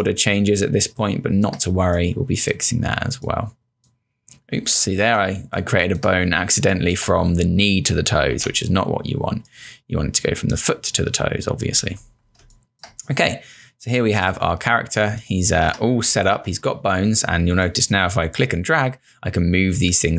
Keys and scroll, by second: 5.2 space, 8.3 z, 12.4 space, 15.0 space.